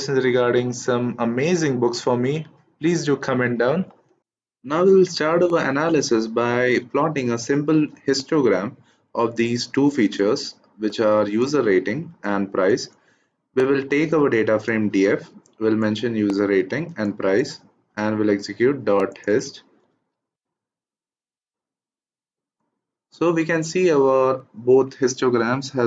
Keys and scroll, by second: 20.0 shift+Return.